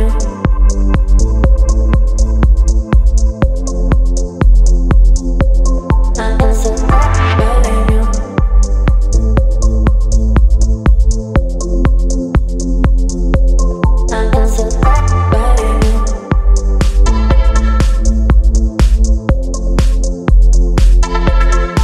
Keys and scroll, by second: 0.0 Return, 3.9 v, 12.1 space, 20.5 ctrl+d, 21.7 ctrl+t.